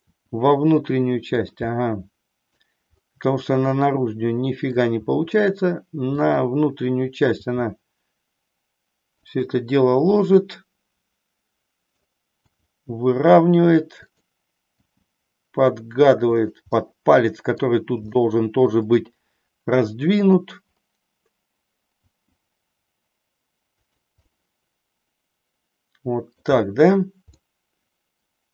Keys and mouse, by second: 0.1 r, 1.7 middle click, 3.6-4.7 middle drag, 5.0 r, 6.4 click, 7.3 g, 9.3 click, 10.3-11.9 middle drag, 12.5 r, 14.1 click, 14.7 g, 16.5 click, 16.7 middle click, 18.1 middle click, 21.9 g, 24.4-26.4 middle drag, 27.4-28.5 middle drag.